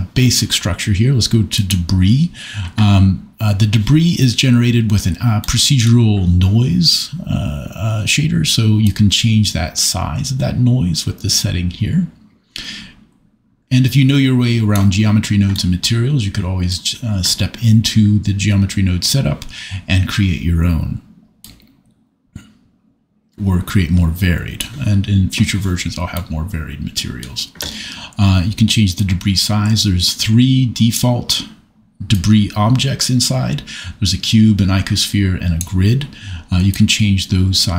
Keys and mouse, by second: 1.5 click, 5.4 middle click, 8.8-14.9 drag, 21.6-24.8 drag, 29.0-31.0 drag, 32.1-33.1 drag, 35.6-36.8 middle drag.